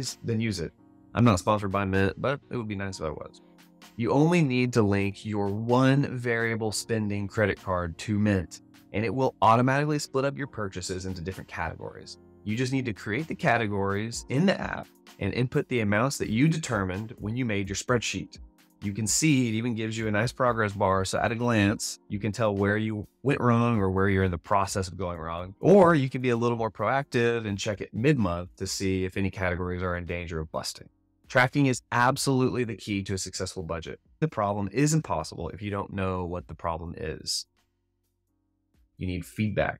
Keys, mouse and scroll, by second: 3.9 alt+a.